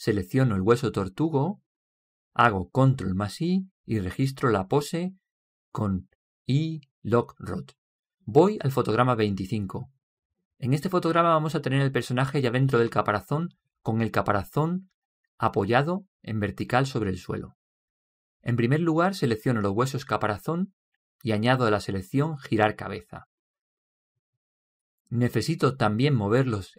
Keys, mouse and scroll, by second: 1.6 right click, 3.9 ctrl+i, 6.0 i, 7.4 i, 23.5 right click.